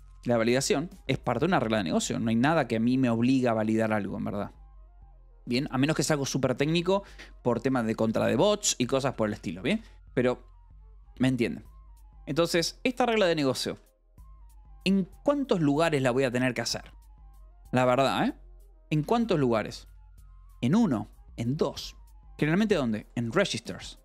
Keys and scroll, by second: 6.0-7.4 typing, 6.4 Escape, 8.7 Escape, 9.1 k, 10.2 shift+v, 11.7 Escape, 12.2 v, 12.8 e, 15.0 Escape, 17.9 k, 19.5 shift+v, 19.8 Escape.